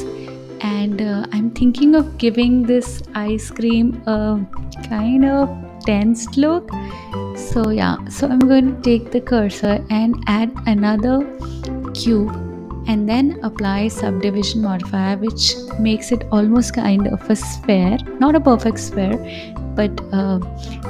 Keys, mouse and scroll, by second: 8.7-10.1 drag, 11.2 shift+a, 13.5 s, 15.5-19.6 drag, 19.6 right click.